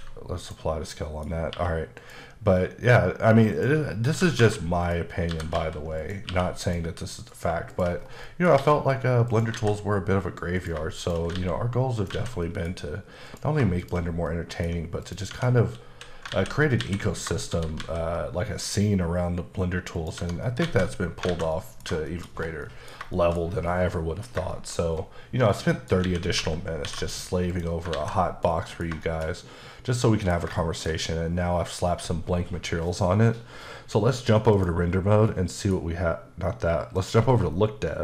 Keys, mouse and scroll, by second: 0.5 click, 1.0 middle click, 1.3 scroll up 1, 2.0 click, 3.6 click, 4.0 scroll up 1, 4.1-6.3 typing, 4.9 click, 6.0 click, 6.7 click, 7.3 click, 7.7 shift+click, 7.9 click, 8.0 scroll down 3, 8.3 middle click, 8.6 alt+x, 9.3 click, 10.6 click, 11.0 click, 11.4 alt+x, 12.0 click, 12.5 middle click, 13.3 click, 13.8 shift+click, 14.3 middle click, 15.1 click, 15.3 Tab, 15.9 a, 17.5 shift+d, 20.0 click, 20.2 Tab, 20.5 middle click, 21.1 scroll down 1, 21.3 alt+a, 21.6 middle click, 22.1 shift+middle click, 22.4 scroll down 1, 22.7 middle click, 23.2 shift+middle click, 24.6 shift+middle click, 24.9-25.5 scroll up 1, 25.5 middle click, 26.1 a, 26.9 alt+m, 27.5 click, 28.0 alt+a, 28.5 middle click, 29.1 shift+middle click, 30.7 shift+middle click, 34.6 click, 35.3 middle click, 37.0 click.